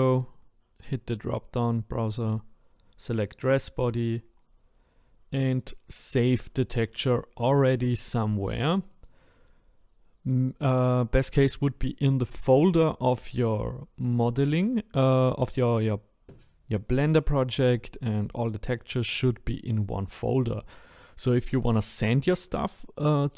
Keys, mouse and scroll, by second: 2.0-23.3 drag.